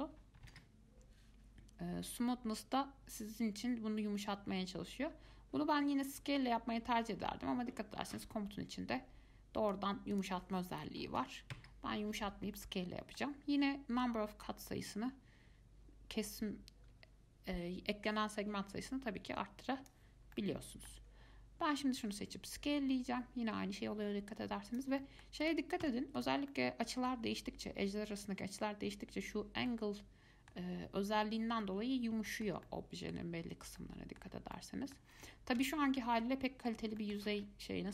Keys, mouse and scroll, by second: 10.3-12.8 drag, 12.8-14.2 middle drag, 14.2-17.2 drag, 20.5-22.2 middle drag, 22.2 s, 25.2-25.6 middle drag, 25.6 click, 26.0 Tab, 26.4 click, 26.7-29.7 middle drag, 29.9-33.6 middle drag, 33.6-34.0 scroll up 2, 34.0 middle click, 34.5 scroll down 2, 34.7 middle click, 35.3 Tab, 35.8 Tab, 36.2-37.6 middle drag, 37.6 scroll up 4.